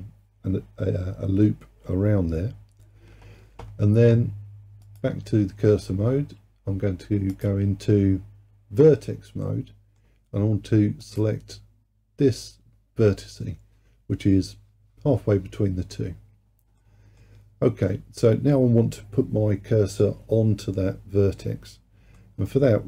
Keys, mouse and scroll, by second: 4.9-9.5 drag, 9.5-11.1 middle drag, 11.1 click, 11.9-14.4 scroll up 4, 16.3-16.8 scroll down 1, 16.8-20.0 middle drag, 22.2-22.8 middle drag.